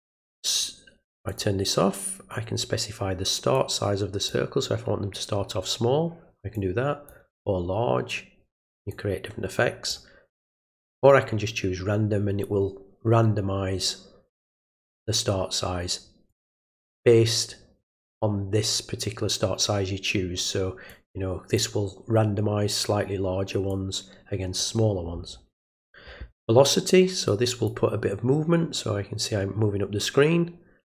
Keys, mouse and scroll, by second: 1.3 click, 3.5 click, 6.5 click, 8.9-9.9 drag, 10.6 click, 16.3 click, 20.9 click, 23.7 click, 27.3 click.